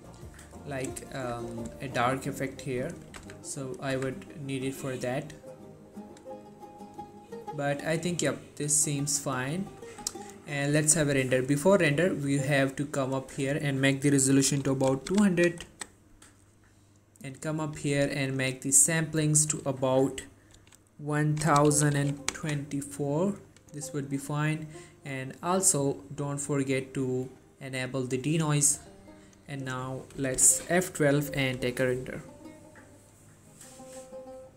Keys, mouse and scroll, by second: 1.3 typing, 3.3-4.6 typing, 10.0 typing, 12.0 click, 17.3 click, 27.4 click, 31.5 F12, 32.6-33.0 scroll down 1.